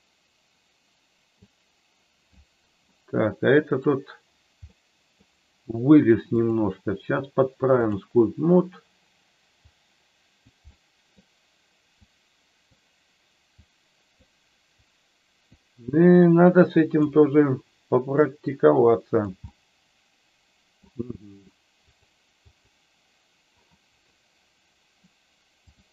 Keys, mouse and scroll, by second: 2.9 middle click, 4.6 middle click, 6.4-7.9 drag, 9.7 click, 10.5 middle click, 12.1 click, 13.5 click, 14.8 click, 16.2 click, 18.2-19.3 drag, 19.4-20.8 middle drag, 22.4 click, 25.7 click.